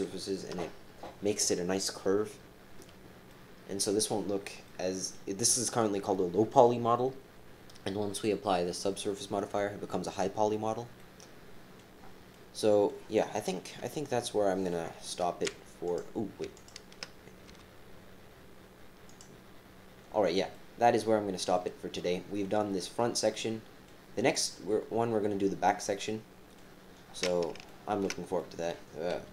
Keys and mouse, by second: 3.3 click, 4.6 click, 10.9 click, 12.3-13.4 drag, 13.4 KP_3, 15.8 click, 16.5 shift+click, 17.5 g, 20.5-21.5 drag, 21.9 click, 23.4 right click, 25.8 click, 27.6 shift+click, 28.4 click, 29.1 KP_3.